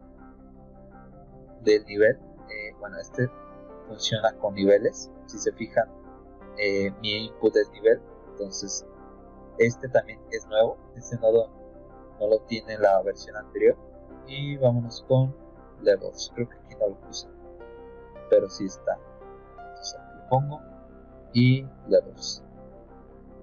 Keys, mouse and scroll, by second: 0.0 click, 1.8 click, 7.2 click, 23.0 click.